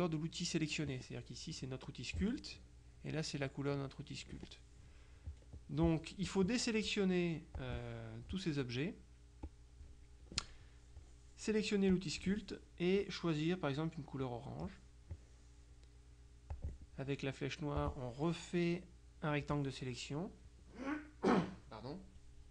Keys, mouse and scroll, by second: 7.6 click, 9.5 click, 12.0 click, 14.4 click, 16.6 click, 17.9-20.0 drag.